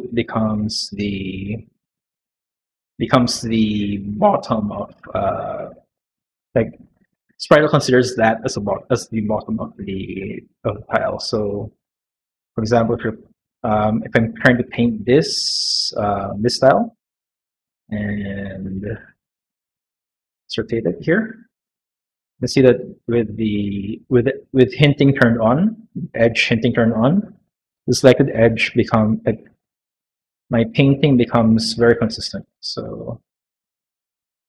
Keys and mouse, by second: 1.8 click, 5.1 click, 17.5 1, 19.2 1, 19.5 q, 20.3 click, 21.3 click, 24.8 click, 25.1 click, 27.6 click, 28.8 click, 29.2 middle click, 29.7 shift+middle click, 31.1 click, 32.0 click, 33.2 click, 33.6 click, 33.9-34.4 middle drag.